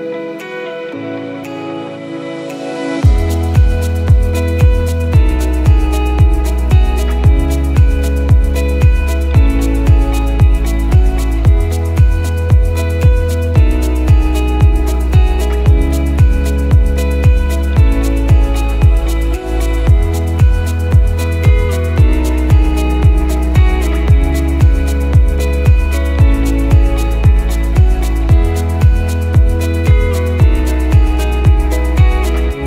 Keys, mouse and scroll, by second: 0.7 click, 3.0 click, 7.0 click, 10.1 click, 15.9 click, 19.9 click, 22.5 scroll down 1, 23.6 click, 27.6 click, 32.5 click.